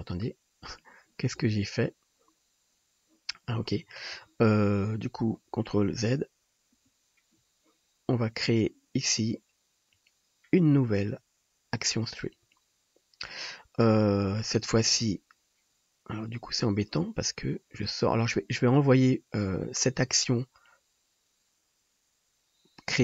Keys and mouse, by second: 1.7-5.4 middle drag, 6.2 ctrl+z, 6.8 ctrl+z, 8.7-9.9 drag.